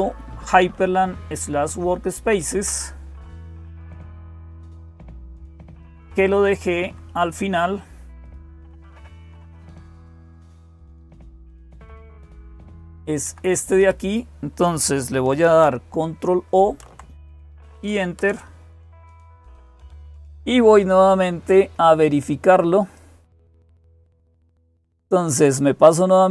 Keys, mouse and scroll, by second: 0.0-26.3 typing, 0.5 Right, 1.2 Right, 1.3 Right, 1.4 Right, 2.0 Down, 2.2 Down, 2.4 Down, 3.1 Page_Down, 5.5 Page_Down, 5.7 Page_Down, 5.8 Page_Down, 6.0 Page_Down, 6.3 Page_Down, 6.9 Page_Down, 7.1 Page_Down, 8.9 Page_Up, 9.4 Page_Up, 10.6-11.9 Up, 13.1 Down, 13.6 Up, 16.5 ctrl+o, 18.0 Return, 22.8-23.8 drag, 26.0 click.